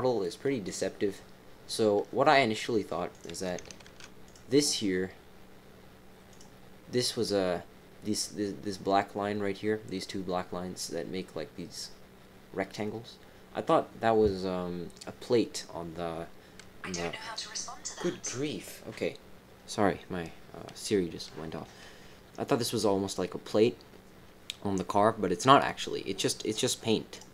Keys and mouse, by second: 3.1 click, 3.8 ctrl+r.